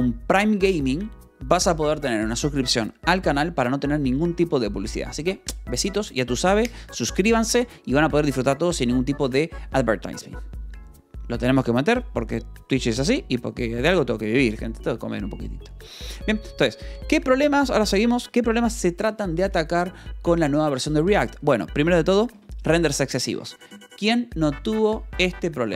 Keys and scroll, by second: 17.3 k, 17.8 j, 19.4 Escape, 21.3 j, 21.6 k, 22.7 shift+v.